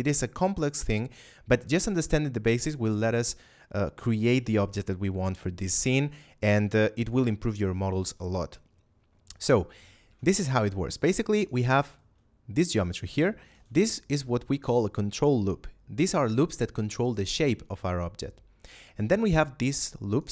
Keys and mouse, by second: 5.9 shift+middle click, 6.8 middle click, 10.0 ctrl+Tab, 10.5 click, 11.3 right click, 11.6 middle click, 12.8 ctrl+right click, 13.3 shift+middle click, 13.8 ctrl+middle click, 14.4 middle click, 18.9 right click, 20.0 ctrl+right click.